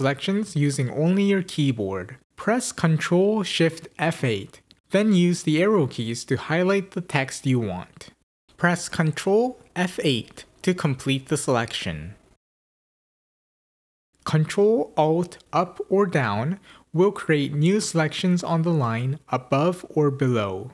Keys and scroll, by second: 2.3 ctrl+shift+F8, 8.5 ctrl+F8, 14.1 ctrl+alt+Up, 14.1 ctrl+alt+Down.